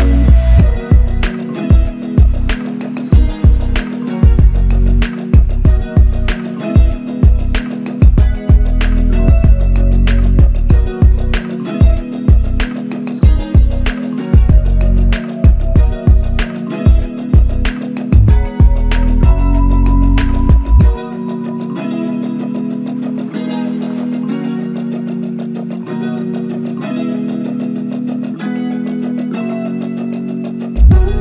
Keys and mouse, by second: 1.0 shift+click, 4.2 shift+click, 6.1 double click, 11.5 double click, 14.1 shift+click, 14.3 shift+double click, 14.7 shift+click, 17.6-18.9 typing, 21.2 shift+click, 22.9 shift+click, 27.8-28.4 typing.